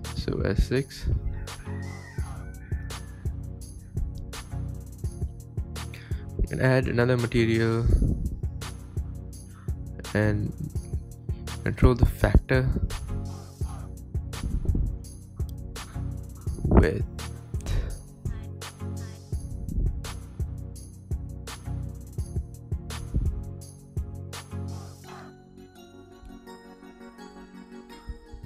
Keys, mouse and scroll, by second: 0.2 Tab, 0.3 scroll down 3, 0.4-2.3 middle drag, 2.3 click, 2.6 scroll up 6, 2.9 scroll down 3, 4.1 click, 6.2 shift+d, 6.8 click, 9.0 shift+a, 10.5 click, 11.0 click, 12.5 click, 13.8 shift+middle click, 14.2 scroll up 3, 14.3-15.0 shift+middle drag, 15.0 click, 15.6 middle click, 16.4 click, 16.7-17.3 shift+middle drag, 17.3 click, 17.3 KP_0, 17.5 space, 17.7-18.5 scroll up 4, 18.6 space, 18.9 click, 19.7 click, 19.9-20.4 scroll up 4, 20.0 shift+middle click, 20.5 click, 21.0 s, 21.8 shift+click, 21.9 s, 24.8 drag, 25.0-26.2 drag, 26.6 right click, 26.9 space, 27.3 KP_0.